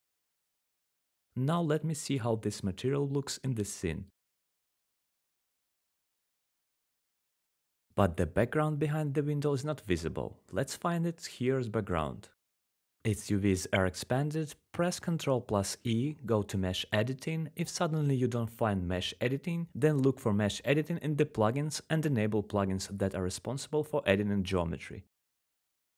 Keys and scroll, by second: 6.7-13.6 typing, 15.4 ctrl+e, 25.5-25.9 typing.